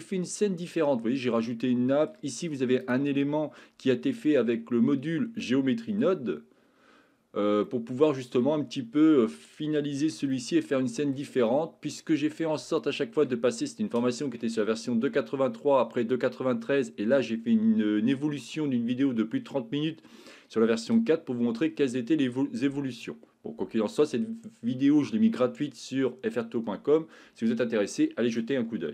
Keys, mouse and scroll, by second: 1.5 shift+middle click, 5.5 middle click, 7.7 shift+middle click, 10.4 shift+middle click, 11.5 middle click, 12.8 shift+middle click.